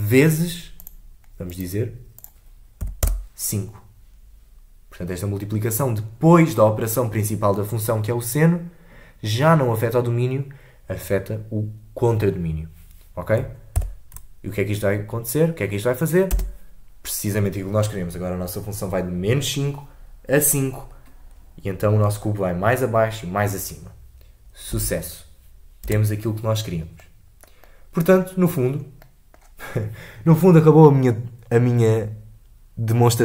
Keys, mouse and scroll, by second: 3.0-13.7 drag, 13.7 shift+Left, 16.3 space, 24.7 space, 25.8 space, 27.0-28.3 middle drag, 28.3-28.8 scroll down 3, 28.8 scroll up 2, 29.0-32.0 middle drag.